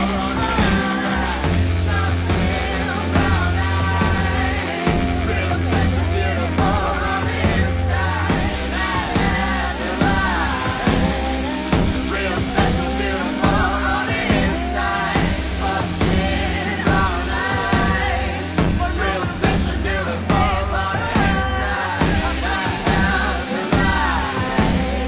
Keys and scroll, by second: 3.1 super+-, 9.6 super+-, 17.9 super+d, 22.7 p.